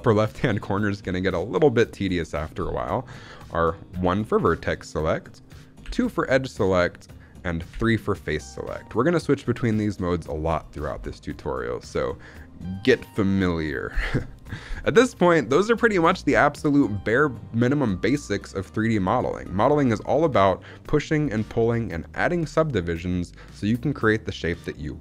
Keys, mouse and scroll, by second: 3.8 1, 5.7 2, 7.6 3, 8.2 click, 8.8 click, 9.1 click, 9.7 click, 11.1 middle click, 14.7 middle click, 19.8 click.